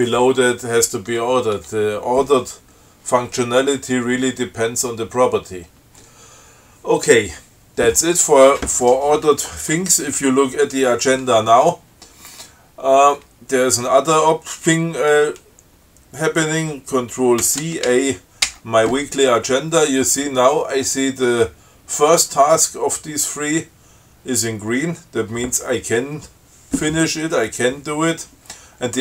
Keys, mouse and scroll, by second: 1.9 Tab, 17.7 ctrl+c, 18.1 ctrl+a.